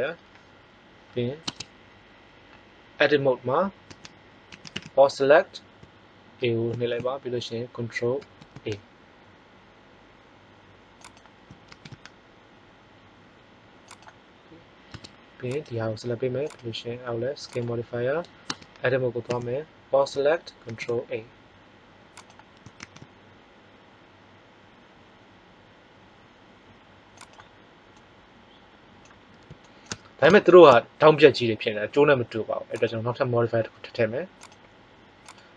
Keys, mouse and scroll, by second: 1.3 Tab, 3.8 a, 4.4 a, 4.7 a, 8.1 ctrl+a, 11.6 ctrl+a, 14.8 Tab, 18.4 Tab, 19.2 a, 20.6 ctrl+a, 22.8 ctrl+a, 27.9 middle click, 32.7-35.5 drag.